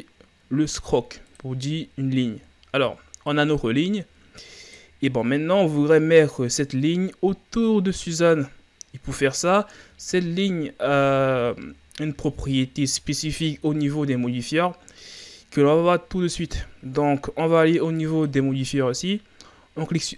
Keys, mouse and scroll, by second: 2.0-2.5 scroll down 3, 2.5-3.4 shift+scroll up 3, 3.4-6.3 drag, 9.6-11.6 shift+scroll up 2, 11.6-12.2 ctrl+scroll up 1, 12.2-13.1 scroll up 2, 13.1-14.4 shift+scroll up 3, 18.1 click.